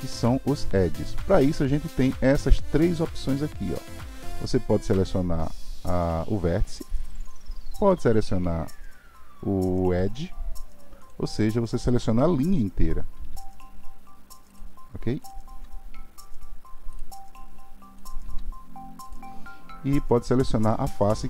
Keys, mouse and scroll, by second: 8.2-13.3 drag, 13.3 g, 15.2 click, 15.5 g, 18.0 click, 18.2 g, 20.6-21.2 drag.